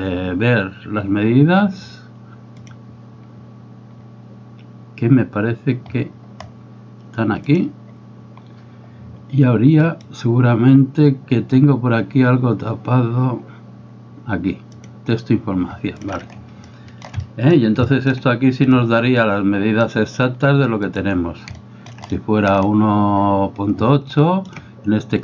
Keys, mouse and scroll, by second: 2.7-8.2 drag, 9.9-15.7 drag, 16.0 click, 16.7 shift+middle click, 17.2 middle click, 17.9 shift+middle click, 19.8 click, 20.9 right click, 21.7 shift+middle click, 22.1 middle click, 24.2 shift+middle click.